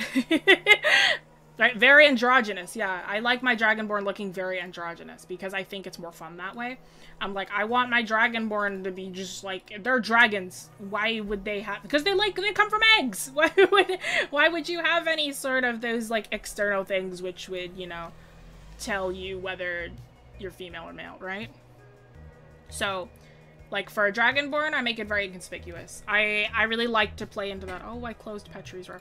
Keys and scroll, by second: 13.0 scroll, 15.9 scroll down 1.